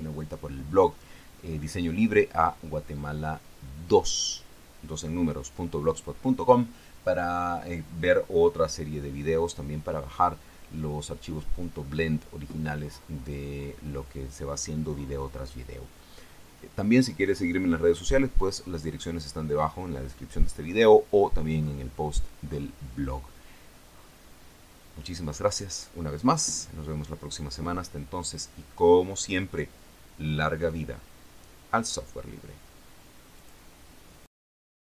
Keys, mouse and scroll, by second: 33.7 click, 34.6 click.